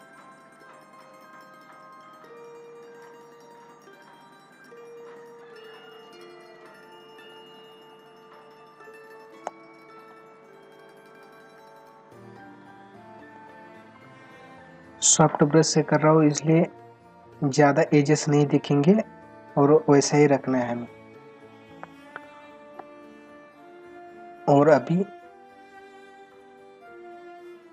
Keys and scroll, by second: 22.2 space, 26.9 ctrl+=.